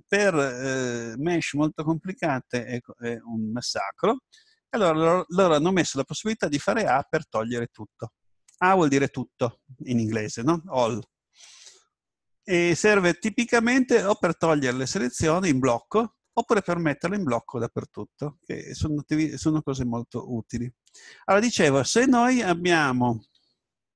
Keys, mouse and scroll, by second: 6.5 a, 23.3 Tab.